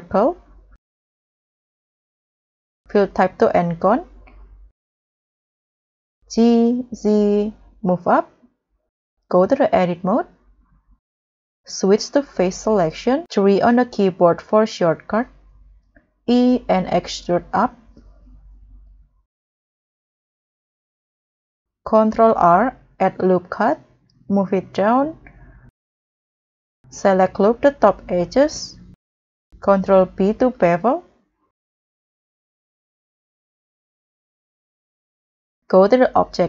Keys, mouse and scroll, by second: 6.2 g, 7.2 z, 16.0 e, 19.8-20.8 scroll up 3, 22.0 scroll, 22.2 ctrl+r, 27.0 double click, 27.6-28.0 scroll down 1, 28.0-28.4 scroll up 2, 29.5 scroll, 30.2 ctrl+b.